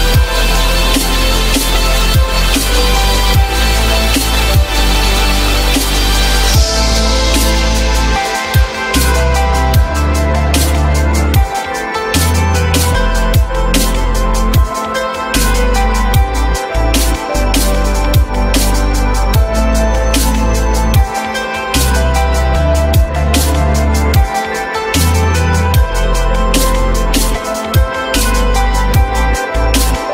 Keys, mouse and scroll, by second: 0.2 ctrl+click, 0.5 ctrl+click, 1.6 F9, 11.4 ctrl+click, 11.8 ctrl+click, 15.4 alt+middle click, 17.0 shift+click, 18.6 ctrl+z, 19.4 shift+click, 25.2 alt+middle click.